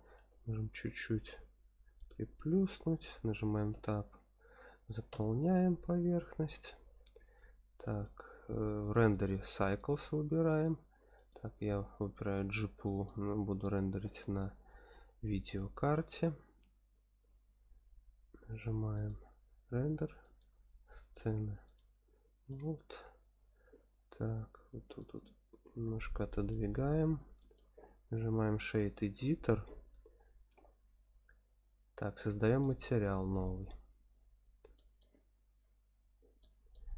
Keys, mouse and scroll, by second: 0.1 x, 1.9 click, 2.7 Tab, 3.7 f, 5.1 Tab, 5.7-6.7 scroll up 2, 7.8 click, 9.1-9.8 drag, 10.5-11.3 drag, 13.0-13.8 shift+middle drag, 15.6 click, 18.9-21.3 drag, 21.6 click, 22.5 click, 25.0-26.5 drag, 27.4-28.8 drag, 30.5 n, 31.4-32.4 scroll down 3, 32.4 click, 33.8 scroll up 2, 34.7 shift+middle drag, 35.2-36.4 scroll up 7, 36.4 middle click.